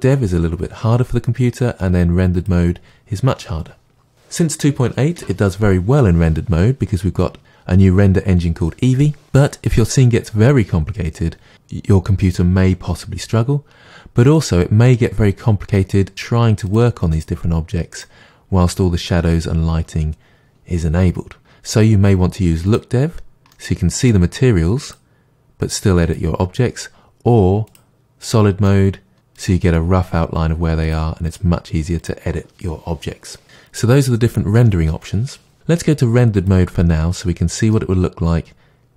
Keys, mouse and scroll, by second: 2.3 click, 15.7-17.4 middle drag, 17.4 click, 22.7 click, 23.5-24.9 middle drag, 24.9 click, 25.7 click, 27.7 click, 28.3-29.1 middle drag, 29.1 click, 36.4 click, 37.7-38.9 middle drag.